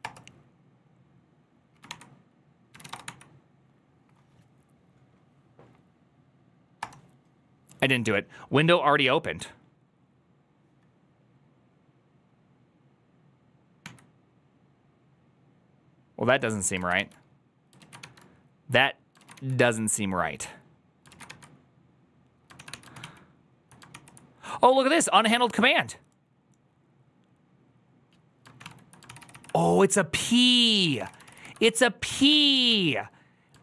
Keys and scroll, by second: 21.4 q.